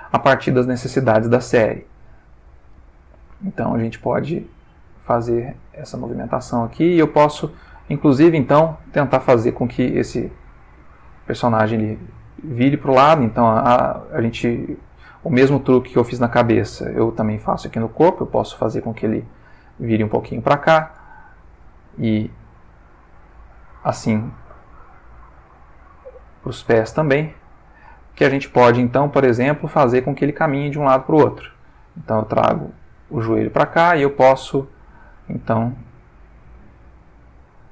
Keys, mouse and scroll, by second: 0.7-1.2 ctrl+shift+middle drag, 1.3 ctrl+shift+middle click, 2.2 ctrl+click, 2.8 r, 3.4 click, 3.7 g, 4.8 click, 5.5 click, 6.2 r, 7.2 click, 7.8 shift+middle click, 9.2-20.1 drag, 20.3 shift+middle click, 21.2 ctrl+shift+middle click, 22.3 click, 23.6-27.9 drag, 28.5 click, 29.4 click, 30.1 click, 30.8 g, 32.5 click, 33.7 click, 33.9 g, 34.9 click, 35.7 click, 36.5 g.